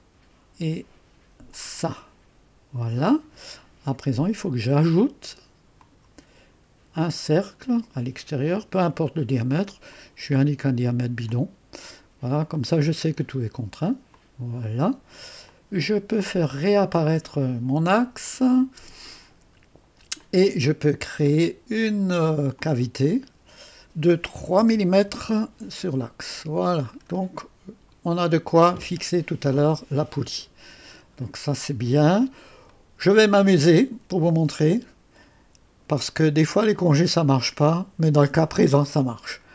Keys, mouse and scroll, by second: 1.5 click, 3.3-3.9 scroll down 2, 5.8 click, 7.2 click, 8.4 click, 9.9 click, 11.3 click, 12.5 click, 14.1 click, 15.5 click, 18.2 click, 18.8 space, 20.2 click, 22.6 click, 25.1 Return, 27.0-27.3 scroll down 1, 27.4-30.5 drag, 32.7-35.9 middle drag, 32.8 typing, 36.4 click.